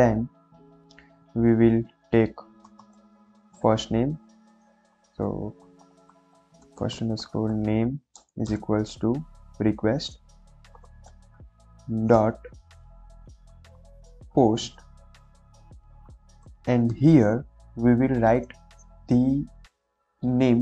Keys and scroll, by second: 2.6 f, 2.9 i, 2.9 s, 3.1 BackSpace, 5.5-8.4 typing, 10.0-12.1 typing, 13.7 shift+p, 13.8 shift+o, 14.0 shift+s, 14.2 shift+t, 15.3 shift+[, 15.5 ], 16.5 Left, 16.8 '.